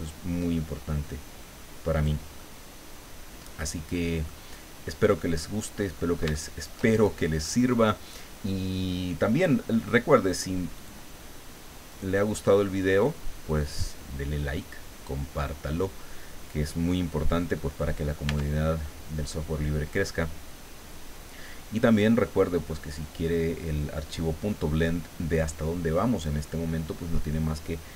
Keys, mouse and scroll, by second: 2.0 click, 2.4-3.8 middle drag, 4.0 scroll down 2, 4.3-5.3 middle drag, 5.9-6.3 scroll up 3, 6.3 shift+middle click, 7.3 middle click, 7.7 scroll up 2, 10.8 click, 11.9 right click, 13.5-15.2 drag, 17.6 middle click, 18.3 Tab, 18.7-19.1 scroll down 1, 19.3-22.4 middle drag, 22.7-23.0 scroll up 1, 24.1 scroll down 1, 24.9 middle click.